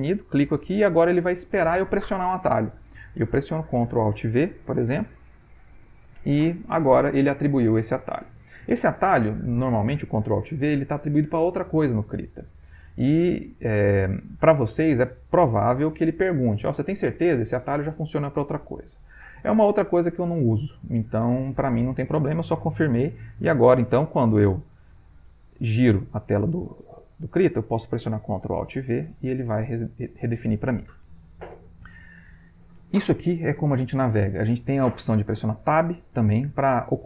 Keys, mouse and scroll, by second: 0.0 click, 4.3 ctrl+alt+v, 23.4 click, 24.3 middle click, 24.8-25.9 scroll up 1, 25.9-27.6 shift+middle drag, 28.6 ctrl+alt+v, 35.9 Tab.